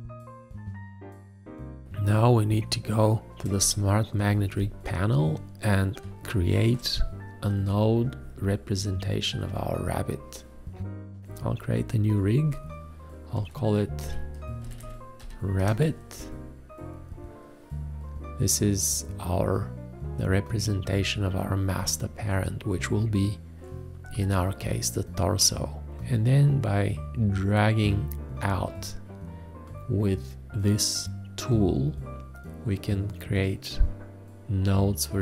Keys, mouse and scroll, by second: 0.5 click, 1.7 space, 3.3 ctrl+a, 3.5 space, 4.5 ctrl+space, 5.9 ctrl+space, 15.2-15.6 typing.